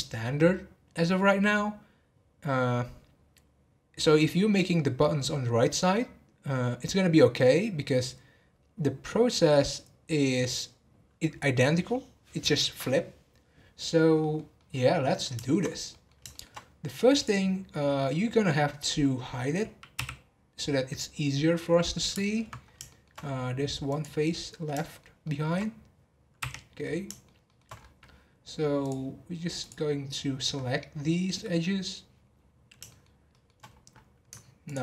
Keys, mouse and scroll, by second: 13.8-14.2 scroll down 1, 14.2-15.6 middle drag, 15.6 scroll up 2, 15.9-17.1 middle drag, 17.1 click, 17.6-19.9 middle drag, 19.9 h, 21.9 middle click, 22.6 scroll up 1, 22.9 shift+middle click, 23.2-23.9 scroll up 4, 23.9 click, 24.5 scroll down 3, 24.8-26.4 shift+middle drag, 26.4 h, 26.6-27.0 scroll down 2, 27.0 shift+middle click, 27.7 scroll up 3, 28.7 scroll up 1, 28.8 click, 30.1-30.5 scroll down 1, 30.5 scroll up 1, 32.3 scroll down 3, 32.8 shift+middle drag, 33.1 shift+scroll down 1, 33.2 shift+middle click, 33.6 scroll up 1, 34.6 ctrl+click.